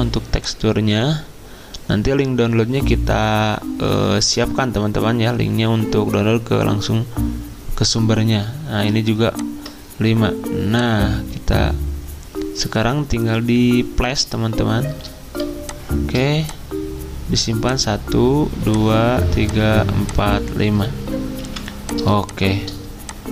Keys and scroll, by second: 21.4 v.